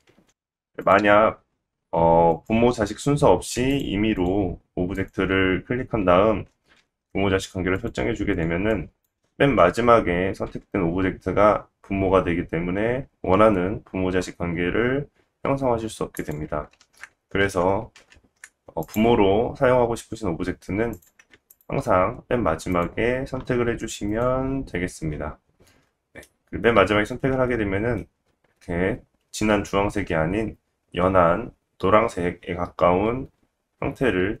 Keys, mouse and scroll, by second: 0.5 ctrl+z, 0.5-0.9 drag, 0.9-2.3 middle drag, 2.3-3.5 drag, 3.5 shift+middle click, 3.7 shift+click, 3.8-4.2 shift+middle drag, 4.2 shift+click, 4.3-4.9 shift+middle drag, 4.9 shift+click, 5.1-8.3 shift+middle drag, 6.8 ctrl+p, 8.3 click, 8.4 middle drag, 8.7-18.9 drag, 10.4 g, 16.8 ctrl+z, 17.4 ctrl+z, 18.0 ctrl+z, 18.9-20.9 middle drag, 20.9 click, 21.0-21.5 shift+middle drag, 21.5 shift+click, 21.6-22.7 shift+middle drag, 22.7 shift+click, 22.8-24.0 shift+middle drag, 24.2 shift+click, 25.8-26.9 middle drag, 26.9 scroll up 2, 27.3-28.1 shift+middle drag.